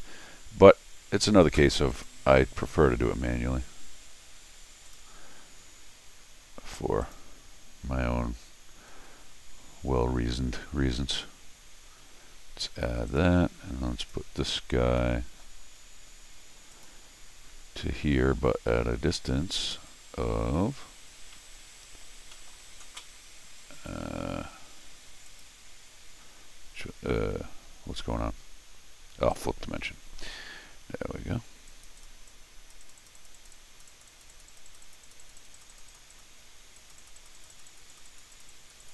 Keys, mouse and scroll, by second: 1.9 click, 4.9 click, 5.3-6.0 scroll down 3, 7.0 click, 8.5-9.8 scroll down 2, 9.8-10.2 scroll down 1, 10.2 scroll up 1, 10.7 middle click, 13.1 click, 14.0 click, 14.5-14.9 scroll down 2, 15.0 middle click, 16.1 scroll up 2, 16.7 click, 19.7 click, 21.2 scroll down 1, 21.3 middle click, 22.3 middle click, 23.7 click, 25.3 click, 29.3 click, 31.7 click, 32.0 click, 32.3 click, 32.8 click, 33.0 click, 33.2 click, 33.3 click, 33.5 click, 33.9 click, 34.1 click, 34.3 click, 34.5 click, 34.7 click, 34.8 click, 35.0 click, 35.2 click, 35.4 click, 35.7 click, 35.9 click, 36.1 click, 36.8 click, 37.0 click, 37.3 click, 37.5 click, 37.7 click, 37.9 click, 38.3 click, 38.5 click, 38.8 click.